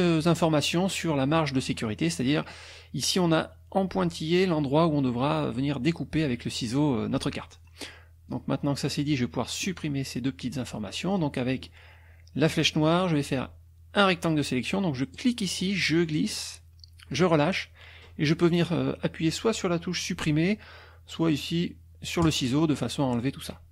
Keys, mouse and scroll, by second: 0.0 click, 0.8 middle click, 1.3 middle click, 7.5 click, 8.3-9.8 drag, 11.1 click, 12.5 click, 15.1-17.3 drag, 22.2 click.